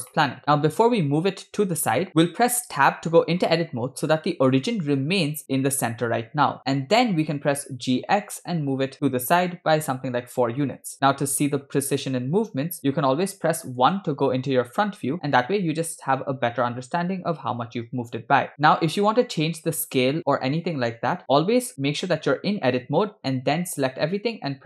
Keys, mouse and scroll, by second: 0.3 shift+middle click, 2.6 Tab, 7.9 g, 12.8 Tab, 14.0 KP_1, 15.1 Tab, 18.6 Tab, 22.1 Tab.